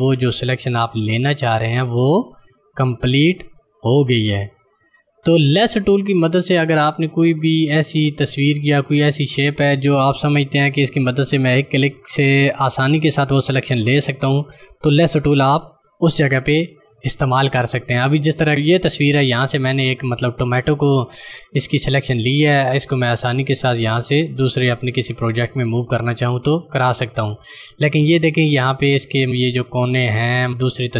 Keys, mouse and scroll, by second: 22.8 click.